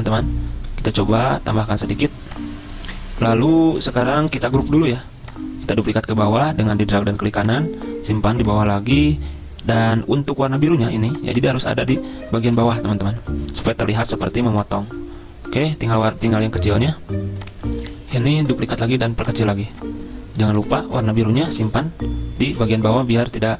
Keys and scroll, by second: 4.8 ctrl+g, 12.5 ctrl+Page_Down, 12.6 ctrl+Page_Down, 21.6 ctrl+Page_Down, 21.7 ctrl+Page_Down, 22.6 ctrl+Page_Down.